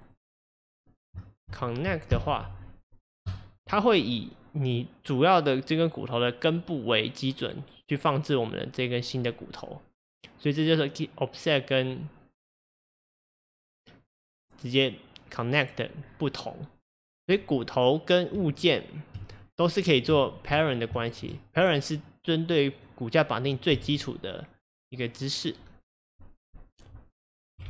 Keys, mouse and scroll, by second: 0.1 click, 0.6 click, 1.3 shift+click, 2.1 ctrl+p, 16.1-16.9 scroll down 4, 18.4 Tab, 19.4-20.2 scroll down 4, 20.2 shift+middle click, 20.6-21.0 scroll down 1, 21.0 shift+middle click, 21.7 click, 22.0 click, 22.6 click, 23.8 g.